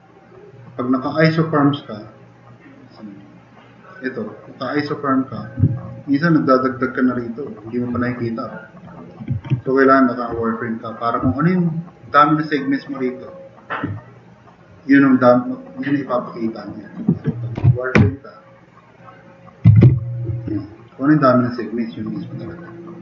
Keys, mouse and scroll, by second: 9.5 ctrl+z, 17.5 n, 18.0 i, 19.4-20.3 typing.